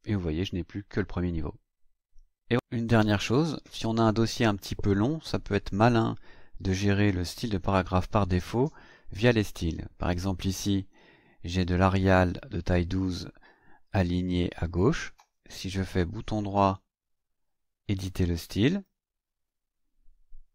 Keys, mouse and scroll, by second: 6.2 scroll down 2, 11.5 click, 16.6 right click, 18.6 click.